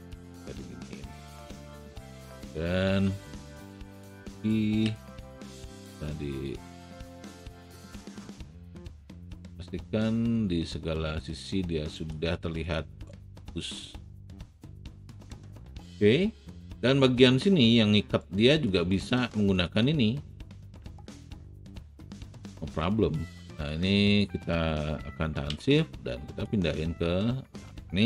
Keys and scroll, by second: 3.2 r, 4.8 w.